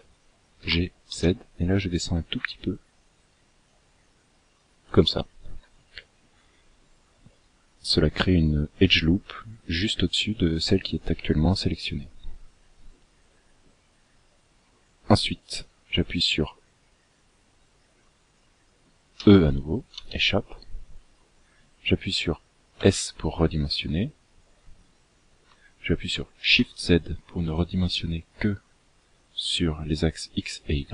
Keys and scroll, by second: 18.6 e, 22.1 s.